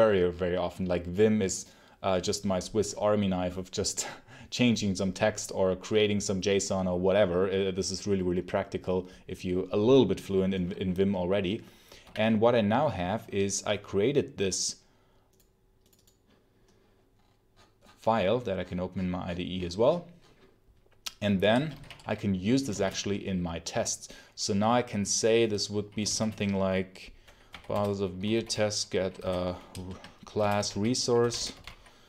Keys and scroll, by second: 11.9 super+l, 21.3-22.6 typing, 25.9 shift+b, 27.4 Down, 27.6 Return, 27.9-29.1 typing, 29.6 ctrl+space, 30.3 Return, 30.6-32.0 typing.